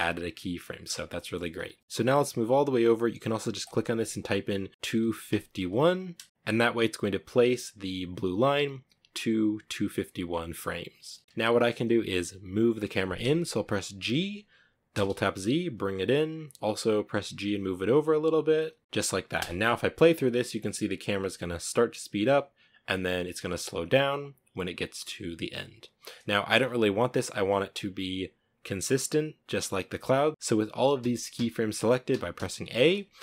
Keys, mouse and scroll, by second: 1.8-5.8 drag, 13.5 g, 16.4 g, 18.4 g, 19.0 space, 24.7-25.8 drag, 25.8-26.7 middle drag, 26.7 scroll up 2, 30.3 a, 30.7 a, 31.4 a, 31.6 a.